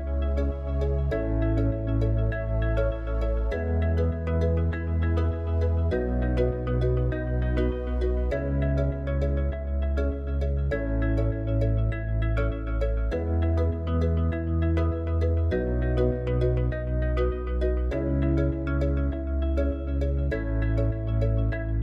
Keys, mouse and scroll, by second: 0.1-1.6 scroll down 5, 1.7 click, 3.6 ctrl+a, 5.9 click, 6.8 click, 9.4 KP_7, 10.5-11.8 scroll up 5, 11.8 g.